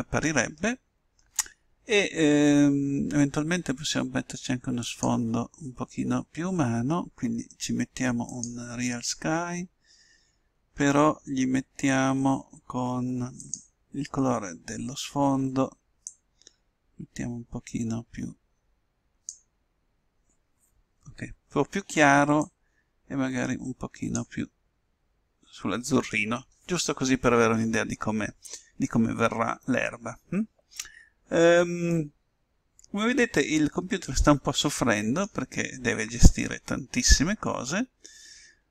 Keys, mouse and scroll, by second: 6.0-7.6 drag, 9.5-11.1 drag, 14.6-16.1 drag, 33.1-34.7 middle drag.